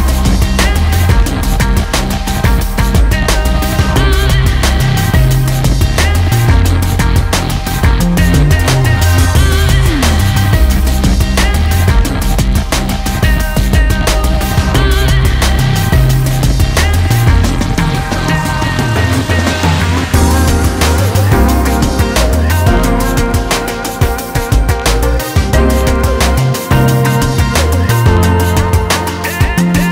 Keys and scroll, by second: 26.0-26.9 typing, 28.6-29.4 typing.